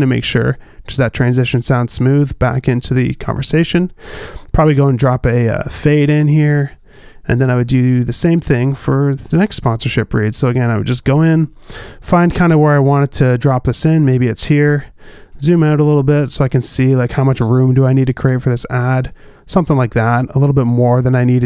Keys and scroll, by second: 1.4 space, 3.9 space, 16.6 b.